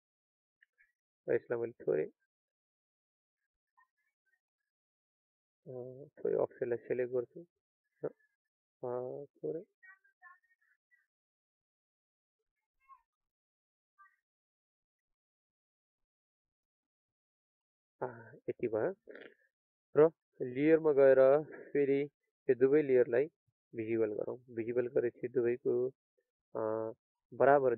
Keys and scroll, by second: 6.7 ctrl+a.